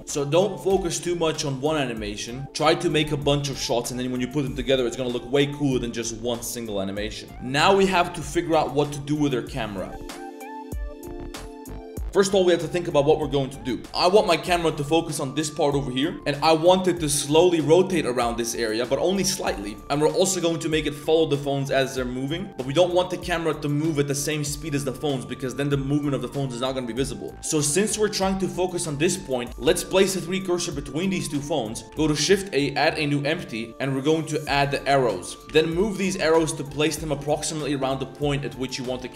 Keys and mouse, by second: 0.0 space, 0.1 space, 0.8-2.4 drag, 0.8 space, 9.3 click, 9.8 click, 14.2 shift+click, 17.3 click, 17.8-19.4 middle drag, 19.7 middle click, 20.0 middle click, 20.2 click, 20.8 click, 21.6 click, 22.0 middle click, 23.0-25.1 drag, 27.4 shift+click, 27.9 click, 28.4 click, 28.8 click, 29.6 shift+s, 30.5 click, 31.8 shift+a, 32.0 shift+a, 35.3 click, 37.5 click, 37.9 shift+middle click, 38.2 middle drag, 39.0 z.